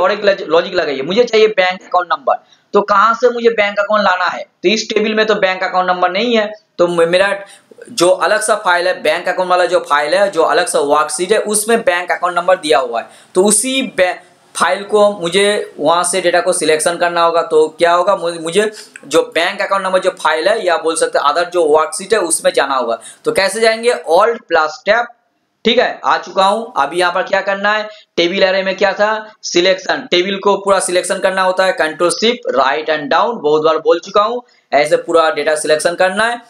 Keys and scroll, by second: 25.2 alt+Tab, 32.6 shift+Right, 33.1 shift+Down.